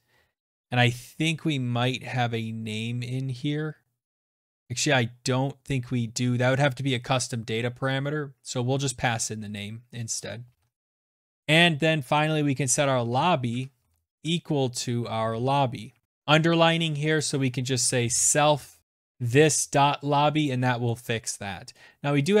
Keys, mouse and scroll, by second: 0.6-1.2 scroll, 2.0-3.4 scroll, 3.7-4.9 scroll, 5.3 click, 6.9 click, 7.1 click, 7.6 shift+click, 7.8 shift+click, 8.1 shift+click, 8.4-14.6 typing, 14.6 Tab, 15.8-19.3 typing, 16.0 click, 18.8 click, 20.2 click, 20.6-22.0 typing.